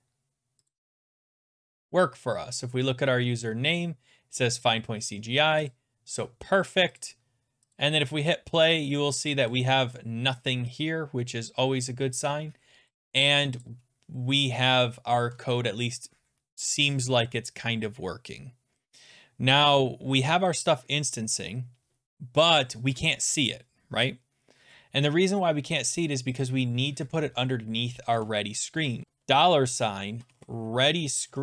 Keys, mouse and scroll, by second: 0.7 click, 5.7 click, 7.0 click, 7.8 click, 12.8 scroll down 2, 12.9 click, 13.7 click, 15.4 alt+Tab, 16.7 click, 21.4 click, 22.0 click, 26.4 click, 28.1 Return, 29.0-31.2 typing.